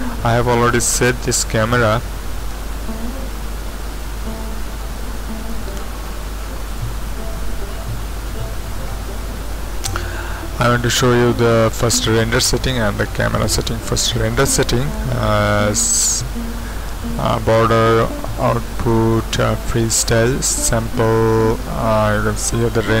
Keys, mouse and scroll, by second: 3.3 super+Up, 6.7-8.0 drag, 8.3 ctrl+Up.